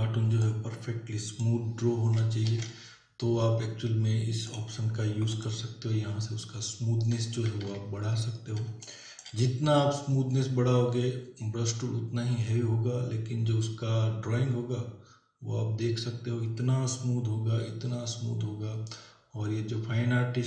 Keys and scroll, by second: 2.5 ctrl+n, 7.6 ctrl+=, 8.7 space.